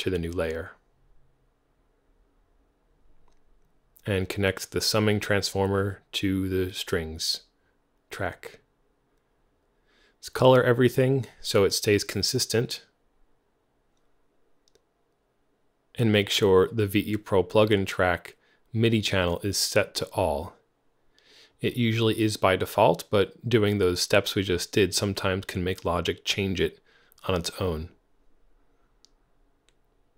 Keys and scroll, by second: 6.6 alt+c, 8.8 Return, 9.8 alt+c, 23.9 shift+super+f, 25.1 ctrl+super+Right, 29.6 alt+c.